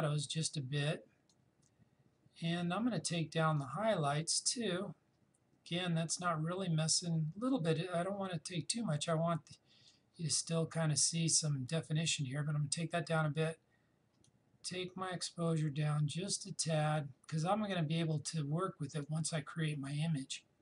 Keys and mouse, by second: 14.3-20.6 drag.